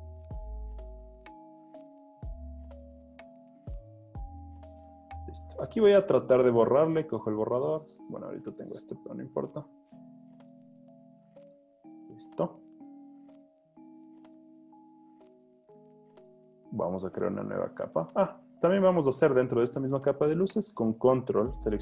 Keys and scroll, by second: 0.8 super+z, 6.8 e, 9.8 super+z, 12.1-13.5 typing, 18.0 z, 18.9 alt+super+z.